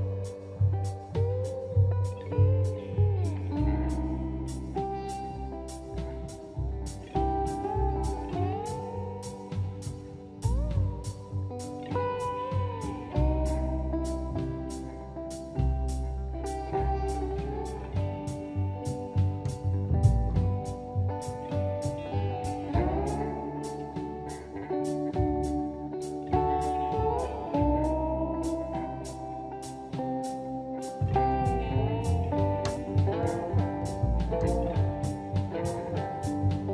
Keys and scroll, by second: 1.8 ctrl+v, 2.4 Escape, 3.6 ctrl+v, 5.2 shift+c, 7.2 q, 8.5-9.9 typing, 9.6 Escape, 10.1 Escape, 10.4 Escape, 13.3 ctrl+c, 13.5 space, 13.6 Escape, 17.6 ctrl+v, 19.1-22.2 typing, 23.3 space, 23.5 Escape, 23.5 space, 24.3 Escape, 24.3 space, 25.2 Escape, 25.9 Escape, 28.5 Escape, 29.1 ctrl+c, 29.3 Escape, 33.6 ctrl+v, 36.2 q.